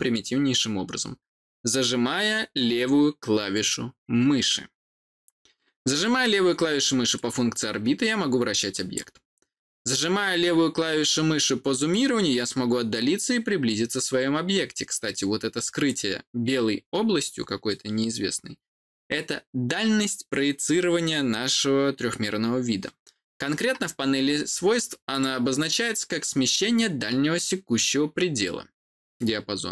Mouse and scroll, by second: 7.1-8.9 drag, 11.8-15.8 drag, 25.0 click.